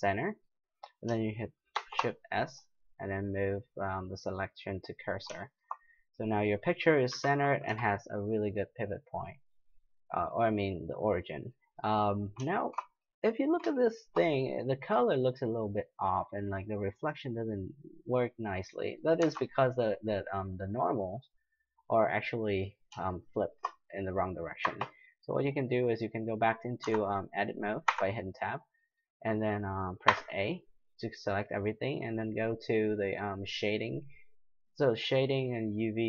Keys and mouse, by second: 1.7 shift+s, 5.6-8.5 middle drag, 7.1 KP_Decimal, 7.7 KP_5, 8.6-10.6 middle drag, 10.6 middle click, 10.8 middle click, 13.2 middle drag, 13.4-14.3 middle drag, 15.7-16.3 middle drag, 17.1-18.6 middle drag, 19.2 Tab, 19.8-22.7 middle drag, 23.3-26.3 middle drag, 24.6 a, 26.8 Tab, 27.8 Tab, 28.8 middle click, 30.1 a.